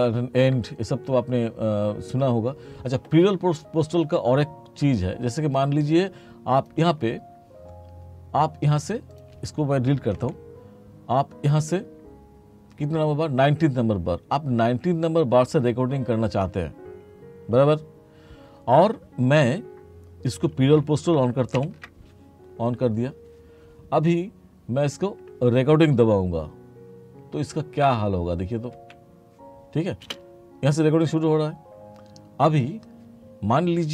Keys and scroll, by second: 10.3 Delete, 21.6 ctrl+k, 28.8 3, 30.1 space.